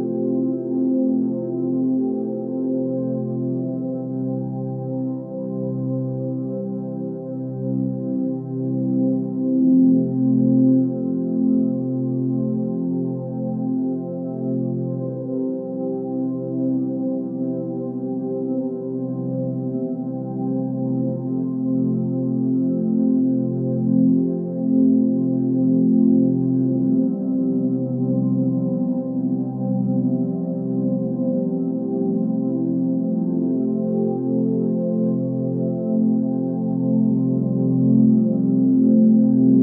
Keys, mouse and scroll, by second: 5.5 g, 10.0-11.7 middle drag, 11.7 KP_1, 16.7-21.9 middle drag, 23.0 ctrl+r, 29.7 ctrl+r, 35.4-37.2 middle drag, 37.2 KP_1, 39.4 1.